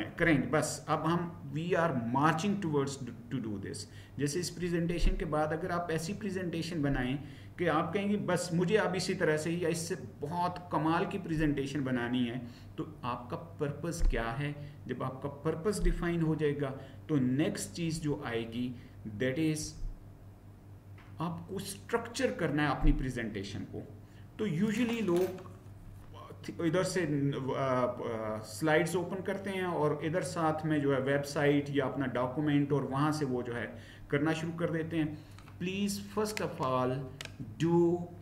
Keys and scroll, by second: 17.9 Right, 19.6 Down.